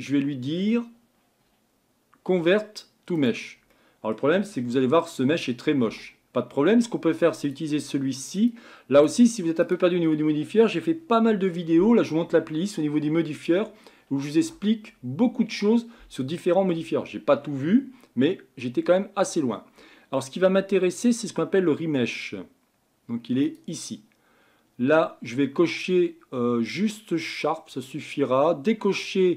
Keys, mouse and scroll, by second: 3.7-4.6 middle drag, 4.6 Tab, 4.9 middle click, 5.8 Tab, 7.4 click, 8.5-13.0 drag, 27.3-29.3 drag.